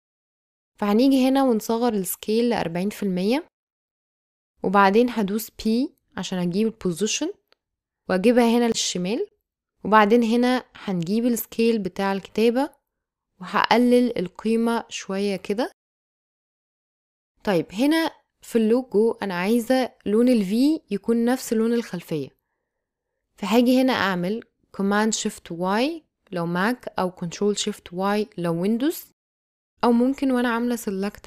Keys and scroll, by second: 2.1 s, 2.9 4, 3.1 Home, 5.4 p, 12.1 s, 24.5 shift+super+y.